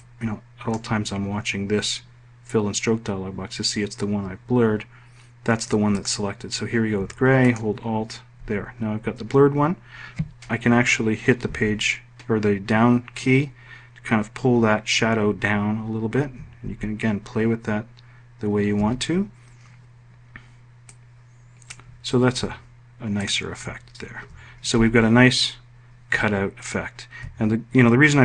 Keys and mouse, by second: 10.9 i, 16.0 alt+i.